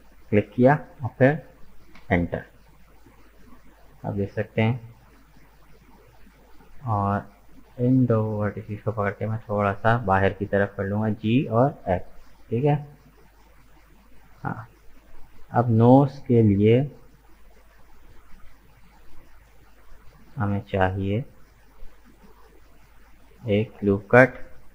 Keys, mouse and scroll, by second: 2.9 right click, 3.3-6.3 middle drag, 6.6-7.7 drag, 7.7 right click, 8.4 shift+right click, 9.1 g, 12.7 Tab, 13.2 right click, 13.5 middle click, 14.3-14.7 scroll down 1, 14.7 middle click, 15.5 right click, 15.9 Tab, 17.7 right click, 18.2-18.6 scroll up 2, 18.6-22.6 shift+middle drag, 23.9 ctrl+r.